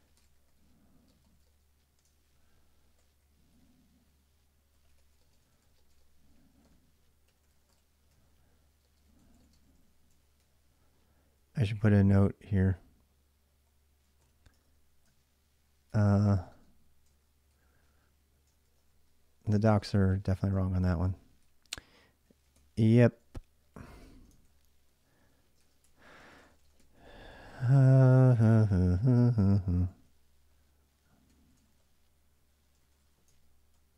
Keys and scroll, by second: 0.0-14.9 typing, 16.0-33.9 typing, 18.6 Return.